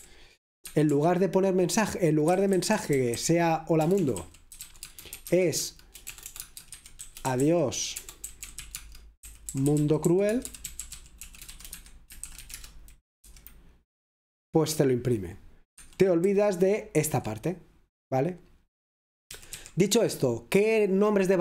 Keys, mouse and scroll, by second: 0.0 typing, 2.3-13.3 typing, 15.9 Escape, 18.5-19.3 typing, 21.1-21.4 typing.